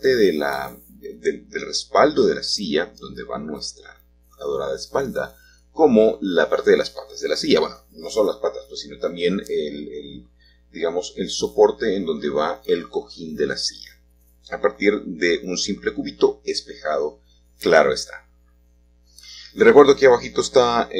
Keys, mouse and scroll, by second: 0.0 g, 2.4-4.5 drag, 5.1-6.9 shift+middle drag, 8.7 g, 12.2-14.5 drag, 14.8 g, 16.0-19.6 drag, 16.1 Tab, 20.2 g.